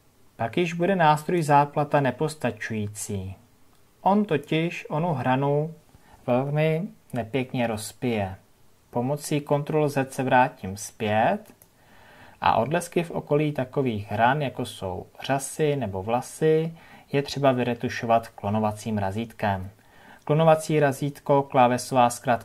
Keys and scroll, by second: 10.5 ctrl+z.